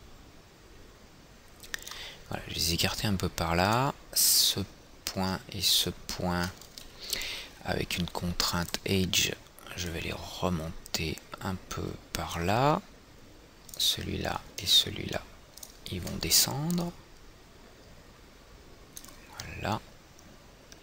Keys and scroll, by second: 7.3 w.